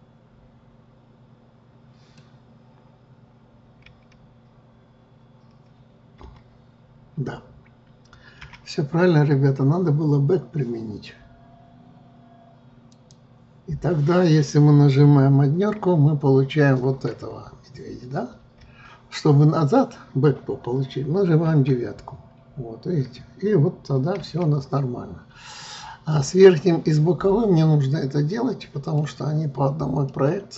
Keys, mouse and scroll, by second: 4.0 KP_1, 6.4 KP_9, 8.5 KP_1, 13.1-16.2 drag, 17.2 scroll up 3, 18.6 KP_1, 21.6 KP_9, 24.3 KP_1, 25.8-30.5 middle drag.